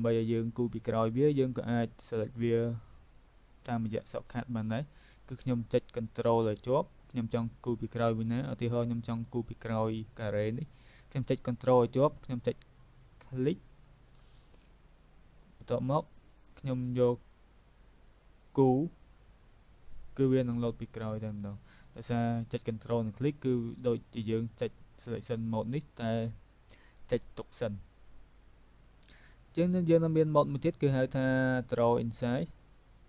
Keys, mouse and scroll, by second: 18.4 click, 20.3 v, 20.7 click, 28.8 click, 30.4 click, 31.6 click, 32.7 click.